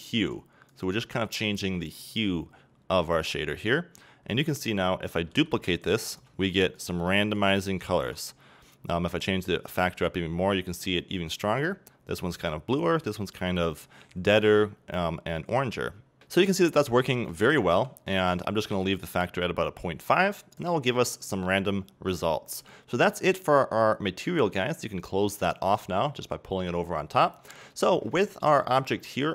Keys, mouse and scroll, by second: 3.9 scroll down 1, 5.3 shift+d, 6.2 click, 6.3 shift+d, 6.8 click, 7.0 shift+d, 7.4 click, 7.6 scroll up 1, 7.9-8.2 shift+middle drag, 8.2-8.6 scroll up 1, 8.7-9.6 scroll down 1, 9.6-11.7 drag, 11.7-13.9 scroll down 2, 16.2 middle click, 16.8 ctrl+z, 20.2-27.4 drag, 27.0-27.4 scroll down 2, 27.4 middle click, 27.5-29.3 scroll up 2.